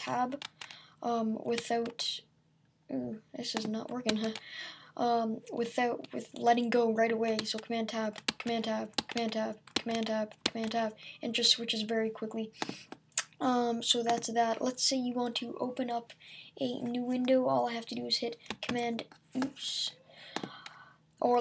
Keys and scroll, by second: 4.1 super+Tab, 7.4 super+Tab, 18.7 super+n.